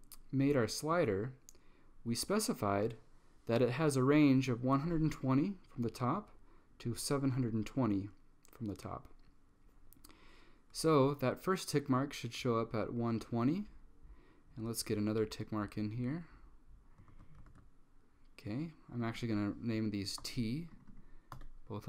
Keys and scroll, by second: 17.2 super+c, 17.6 super+v, 20.3 t, 21.4 t.